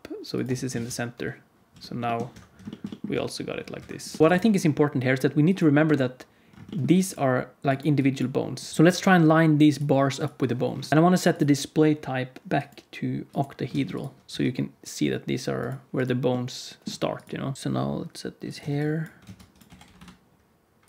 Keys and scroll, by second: 0.4 Tab, 0.6 alt+z, 1.6 r, 3.1 r, 4.2 alt+a, 4.2 KP_1, 4.3 ctrl+s, 5.8 Tab, 8.7 alt+a, 8.8 g, 10.9 alt+a, 13.6 alt+a, 14.2 g, 17.5 alt+a, 17.5 ctrl+s, 17.5 KP_1, 17.5 KP_3, 17.5 r, 18.5 Tab, 19.1 alt+z, 19.6 g.